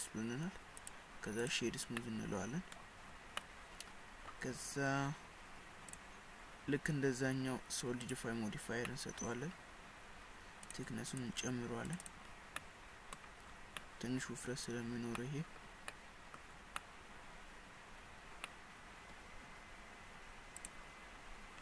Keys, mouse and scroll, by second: 0.8 right click, 2.0 middle click, 3.1-3.4 scroll up 4, 3.4 middle click, 5.9 click, 8.9 middle click, 10.7 click, 11.1 click, 11.9 click, 12.1 click, 12.6 middle click, 13.5-13.8 scroll up 3, 13.8 middle click, 14.8-15.2 scroll down 4, 15.2 middle click, 16.0 middle click, 16.6-17.0 scroll up 3, 17.0 middle click, 18.1 scroll down 5, 18.5 middle click, 20.6 click.